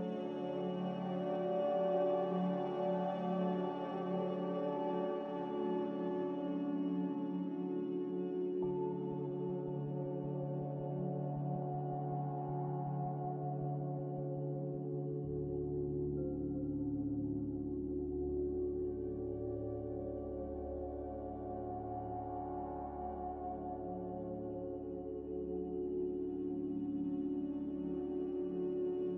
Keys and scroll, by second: 11.9 b, 13.4 Delete, 14.1 Delete, 14.4 Delete, 18.4 n, 28.0 ctrl+z, 28.4 ctrl+z.